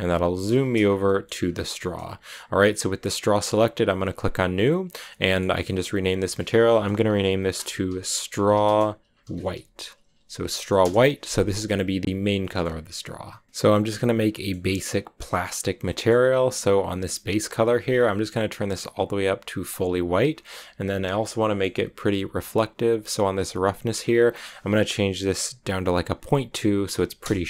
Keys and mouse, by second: 0.9 click, 5.0 middle click, 7.1-11.3 drag.